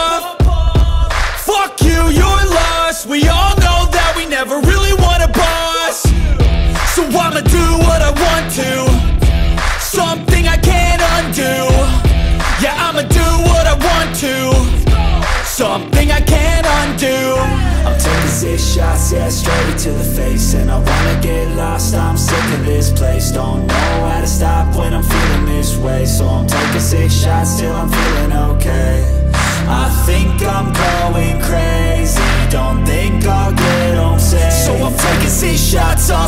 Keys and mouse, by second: 3.9 click, 5.5-12.3 right drag, 19.9-22.4 drag, 26.2 click, 31.1 click, 35.0 click.